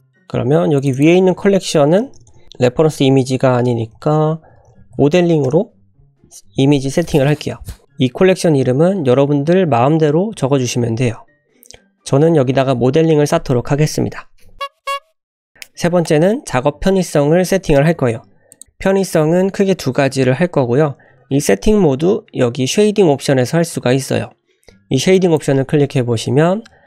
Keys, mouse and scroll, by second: 0.8 click, 1.0-6.1 drag, 2.2 BackSpace, 2.3 BackSpace, 18.9 click, 25.1-26.8 drag.